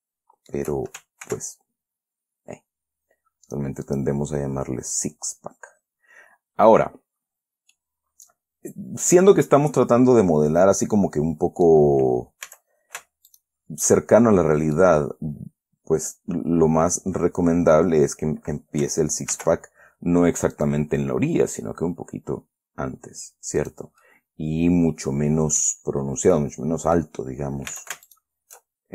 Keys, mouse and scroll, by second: 0.2 shift+middle click, 1.0 shift+right click, 1.6 ctrl+r, 2.1-2.4 ctrl+scroll up 3, 3.1 scroll up 2, 3.8 click, 4.2 click, 8.1-12.2 drag, 12.8 a, 13.6 alt+shift+right click, 15.1-18.4 middle drag, 19.7 ctrl+r, 20.9 click, 24.0 click, 24.4-26.1 middle drag, 26.1 scroll down 1, 26.7 middle click, 26.8 scroll down 1, 27.5-27.9 scroll up 2, 28.1 a, 28.4 alt+shift+right click.